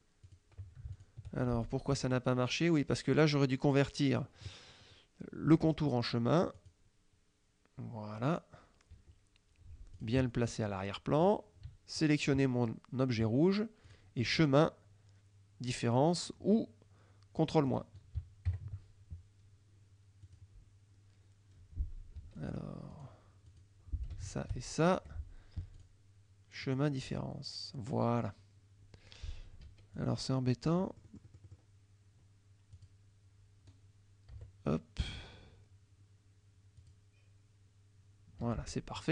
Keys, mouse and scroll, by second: 0.3 click, 1.0 shift+click, 1.7 shift+click, 2.0 shift+F2, 2.1 shift+click, 6.6 click, 8.9 F1, 10.0 click, 11.3 click, 12.0 shift+click, 13.9 click, 17.8 click, 18.6 ctrl+KP_Subtract, 20.3 click, 22.3 F2, 22.4 click, 23.0 click, 23.6 click, 24.3 shift+click, 24.9 shift+F1, 25.8 click, 26.7 click, 29.7 F2, 30.0 click, 30.7 F1, 30.9 middle click, 32.8 click, 34.4 Delete, 35.4 F2, 36.9 click, 38.5 F1.